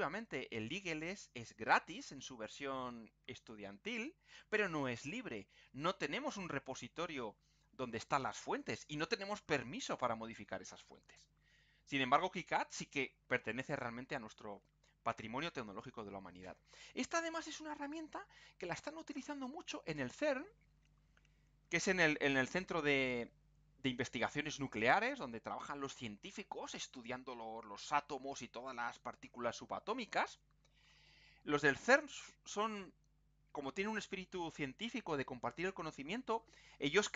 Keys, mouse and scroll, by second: 6.7-7.1 scroll down 2, 8.3-8.8 scroll up 2, 9.9-10.3 scroll up 2, 12.1 click.